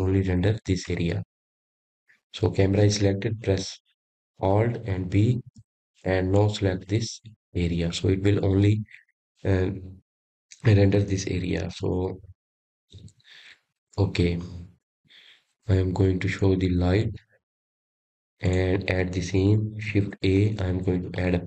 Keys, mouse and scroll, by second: 4.7 click, 5.4 click, 8.1 ctrl+b, 16.2 KP_0, 20.4 click.